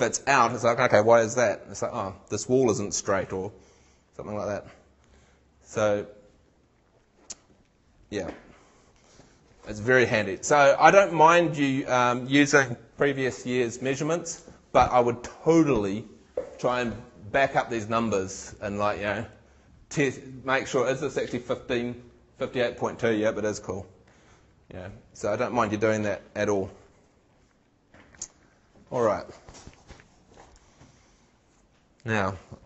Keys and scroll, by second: 10.4 super+Tab.